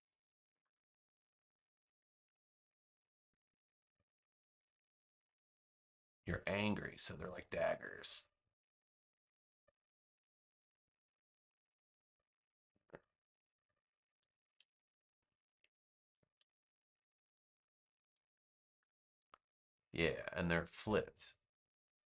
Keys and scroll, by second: 14.5 BackSpace, 16.0 super+j.